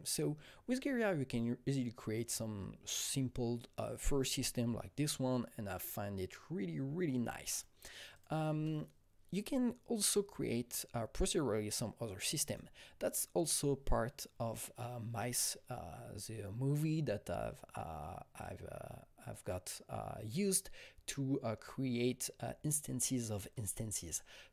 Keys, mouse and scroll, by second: 7.5 click, 7.5 space, 8.1 click, 8.4 space, 12.7 click, 12.7 space.